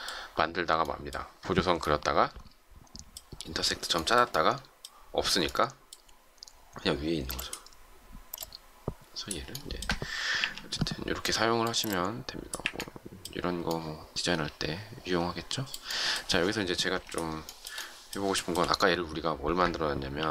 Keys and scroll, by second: 7.0 space, 10.2 Delete, 12.5 Delete, 20.1 m.